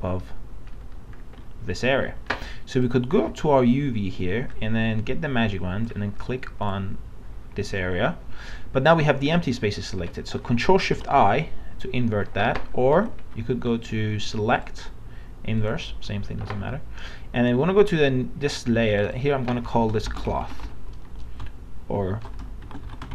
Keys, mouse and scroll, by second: 2.8-6.5 drag, 10.9 ctrl+shift+i, 13.0 ctrl+z, 14.5-16.7 drag, 19.8-21.0 typing, 22.3-23.1 typing.